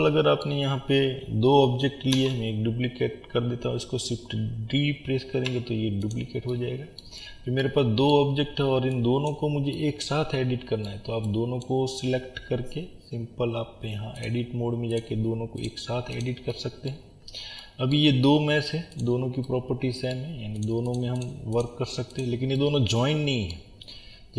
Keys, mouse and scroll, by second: 0.0-9.3 middle drag, 2.2 shift+d, 7.2-7.6 scroll up 1, 9.3 click, 9.8-11.6 middle drag, 11.6 click, 15.0 click, 16.5-19.0 middle drag, 17.0 scroll up 1, 18.1-19.0 scroll down 2, 19.0 click, 19.5-20.6 middle drag, 20.6 click, 22.6-24.3 middle drag, 23.7 scroll up 1.